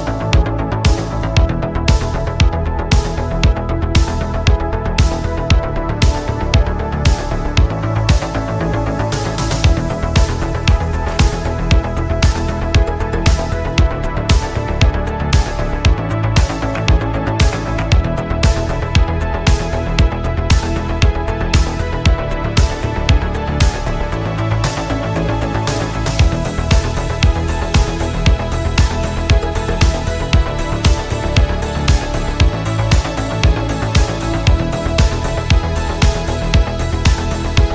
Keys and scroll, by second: 20.9 ctrl+z, 25.0 ctrl+z, 28.0 ctrl+e.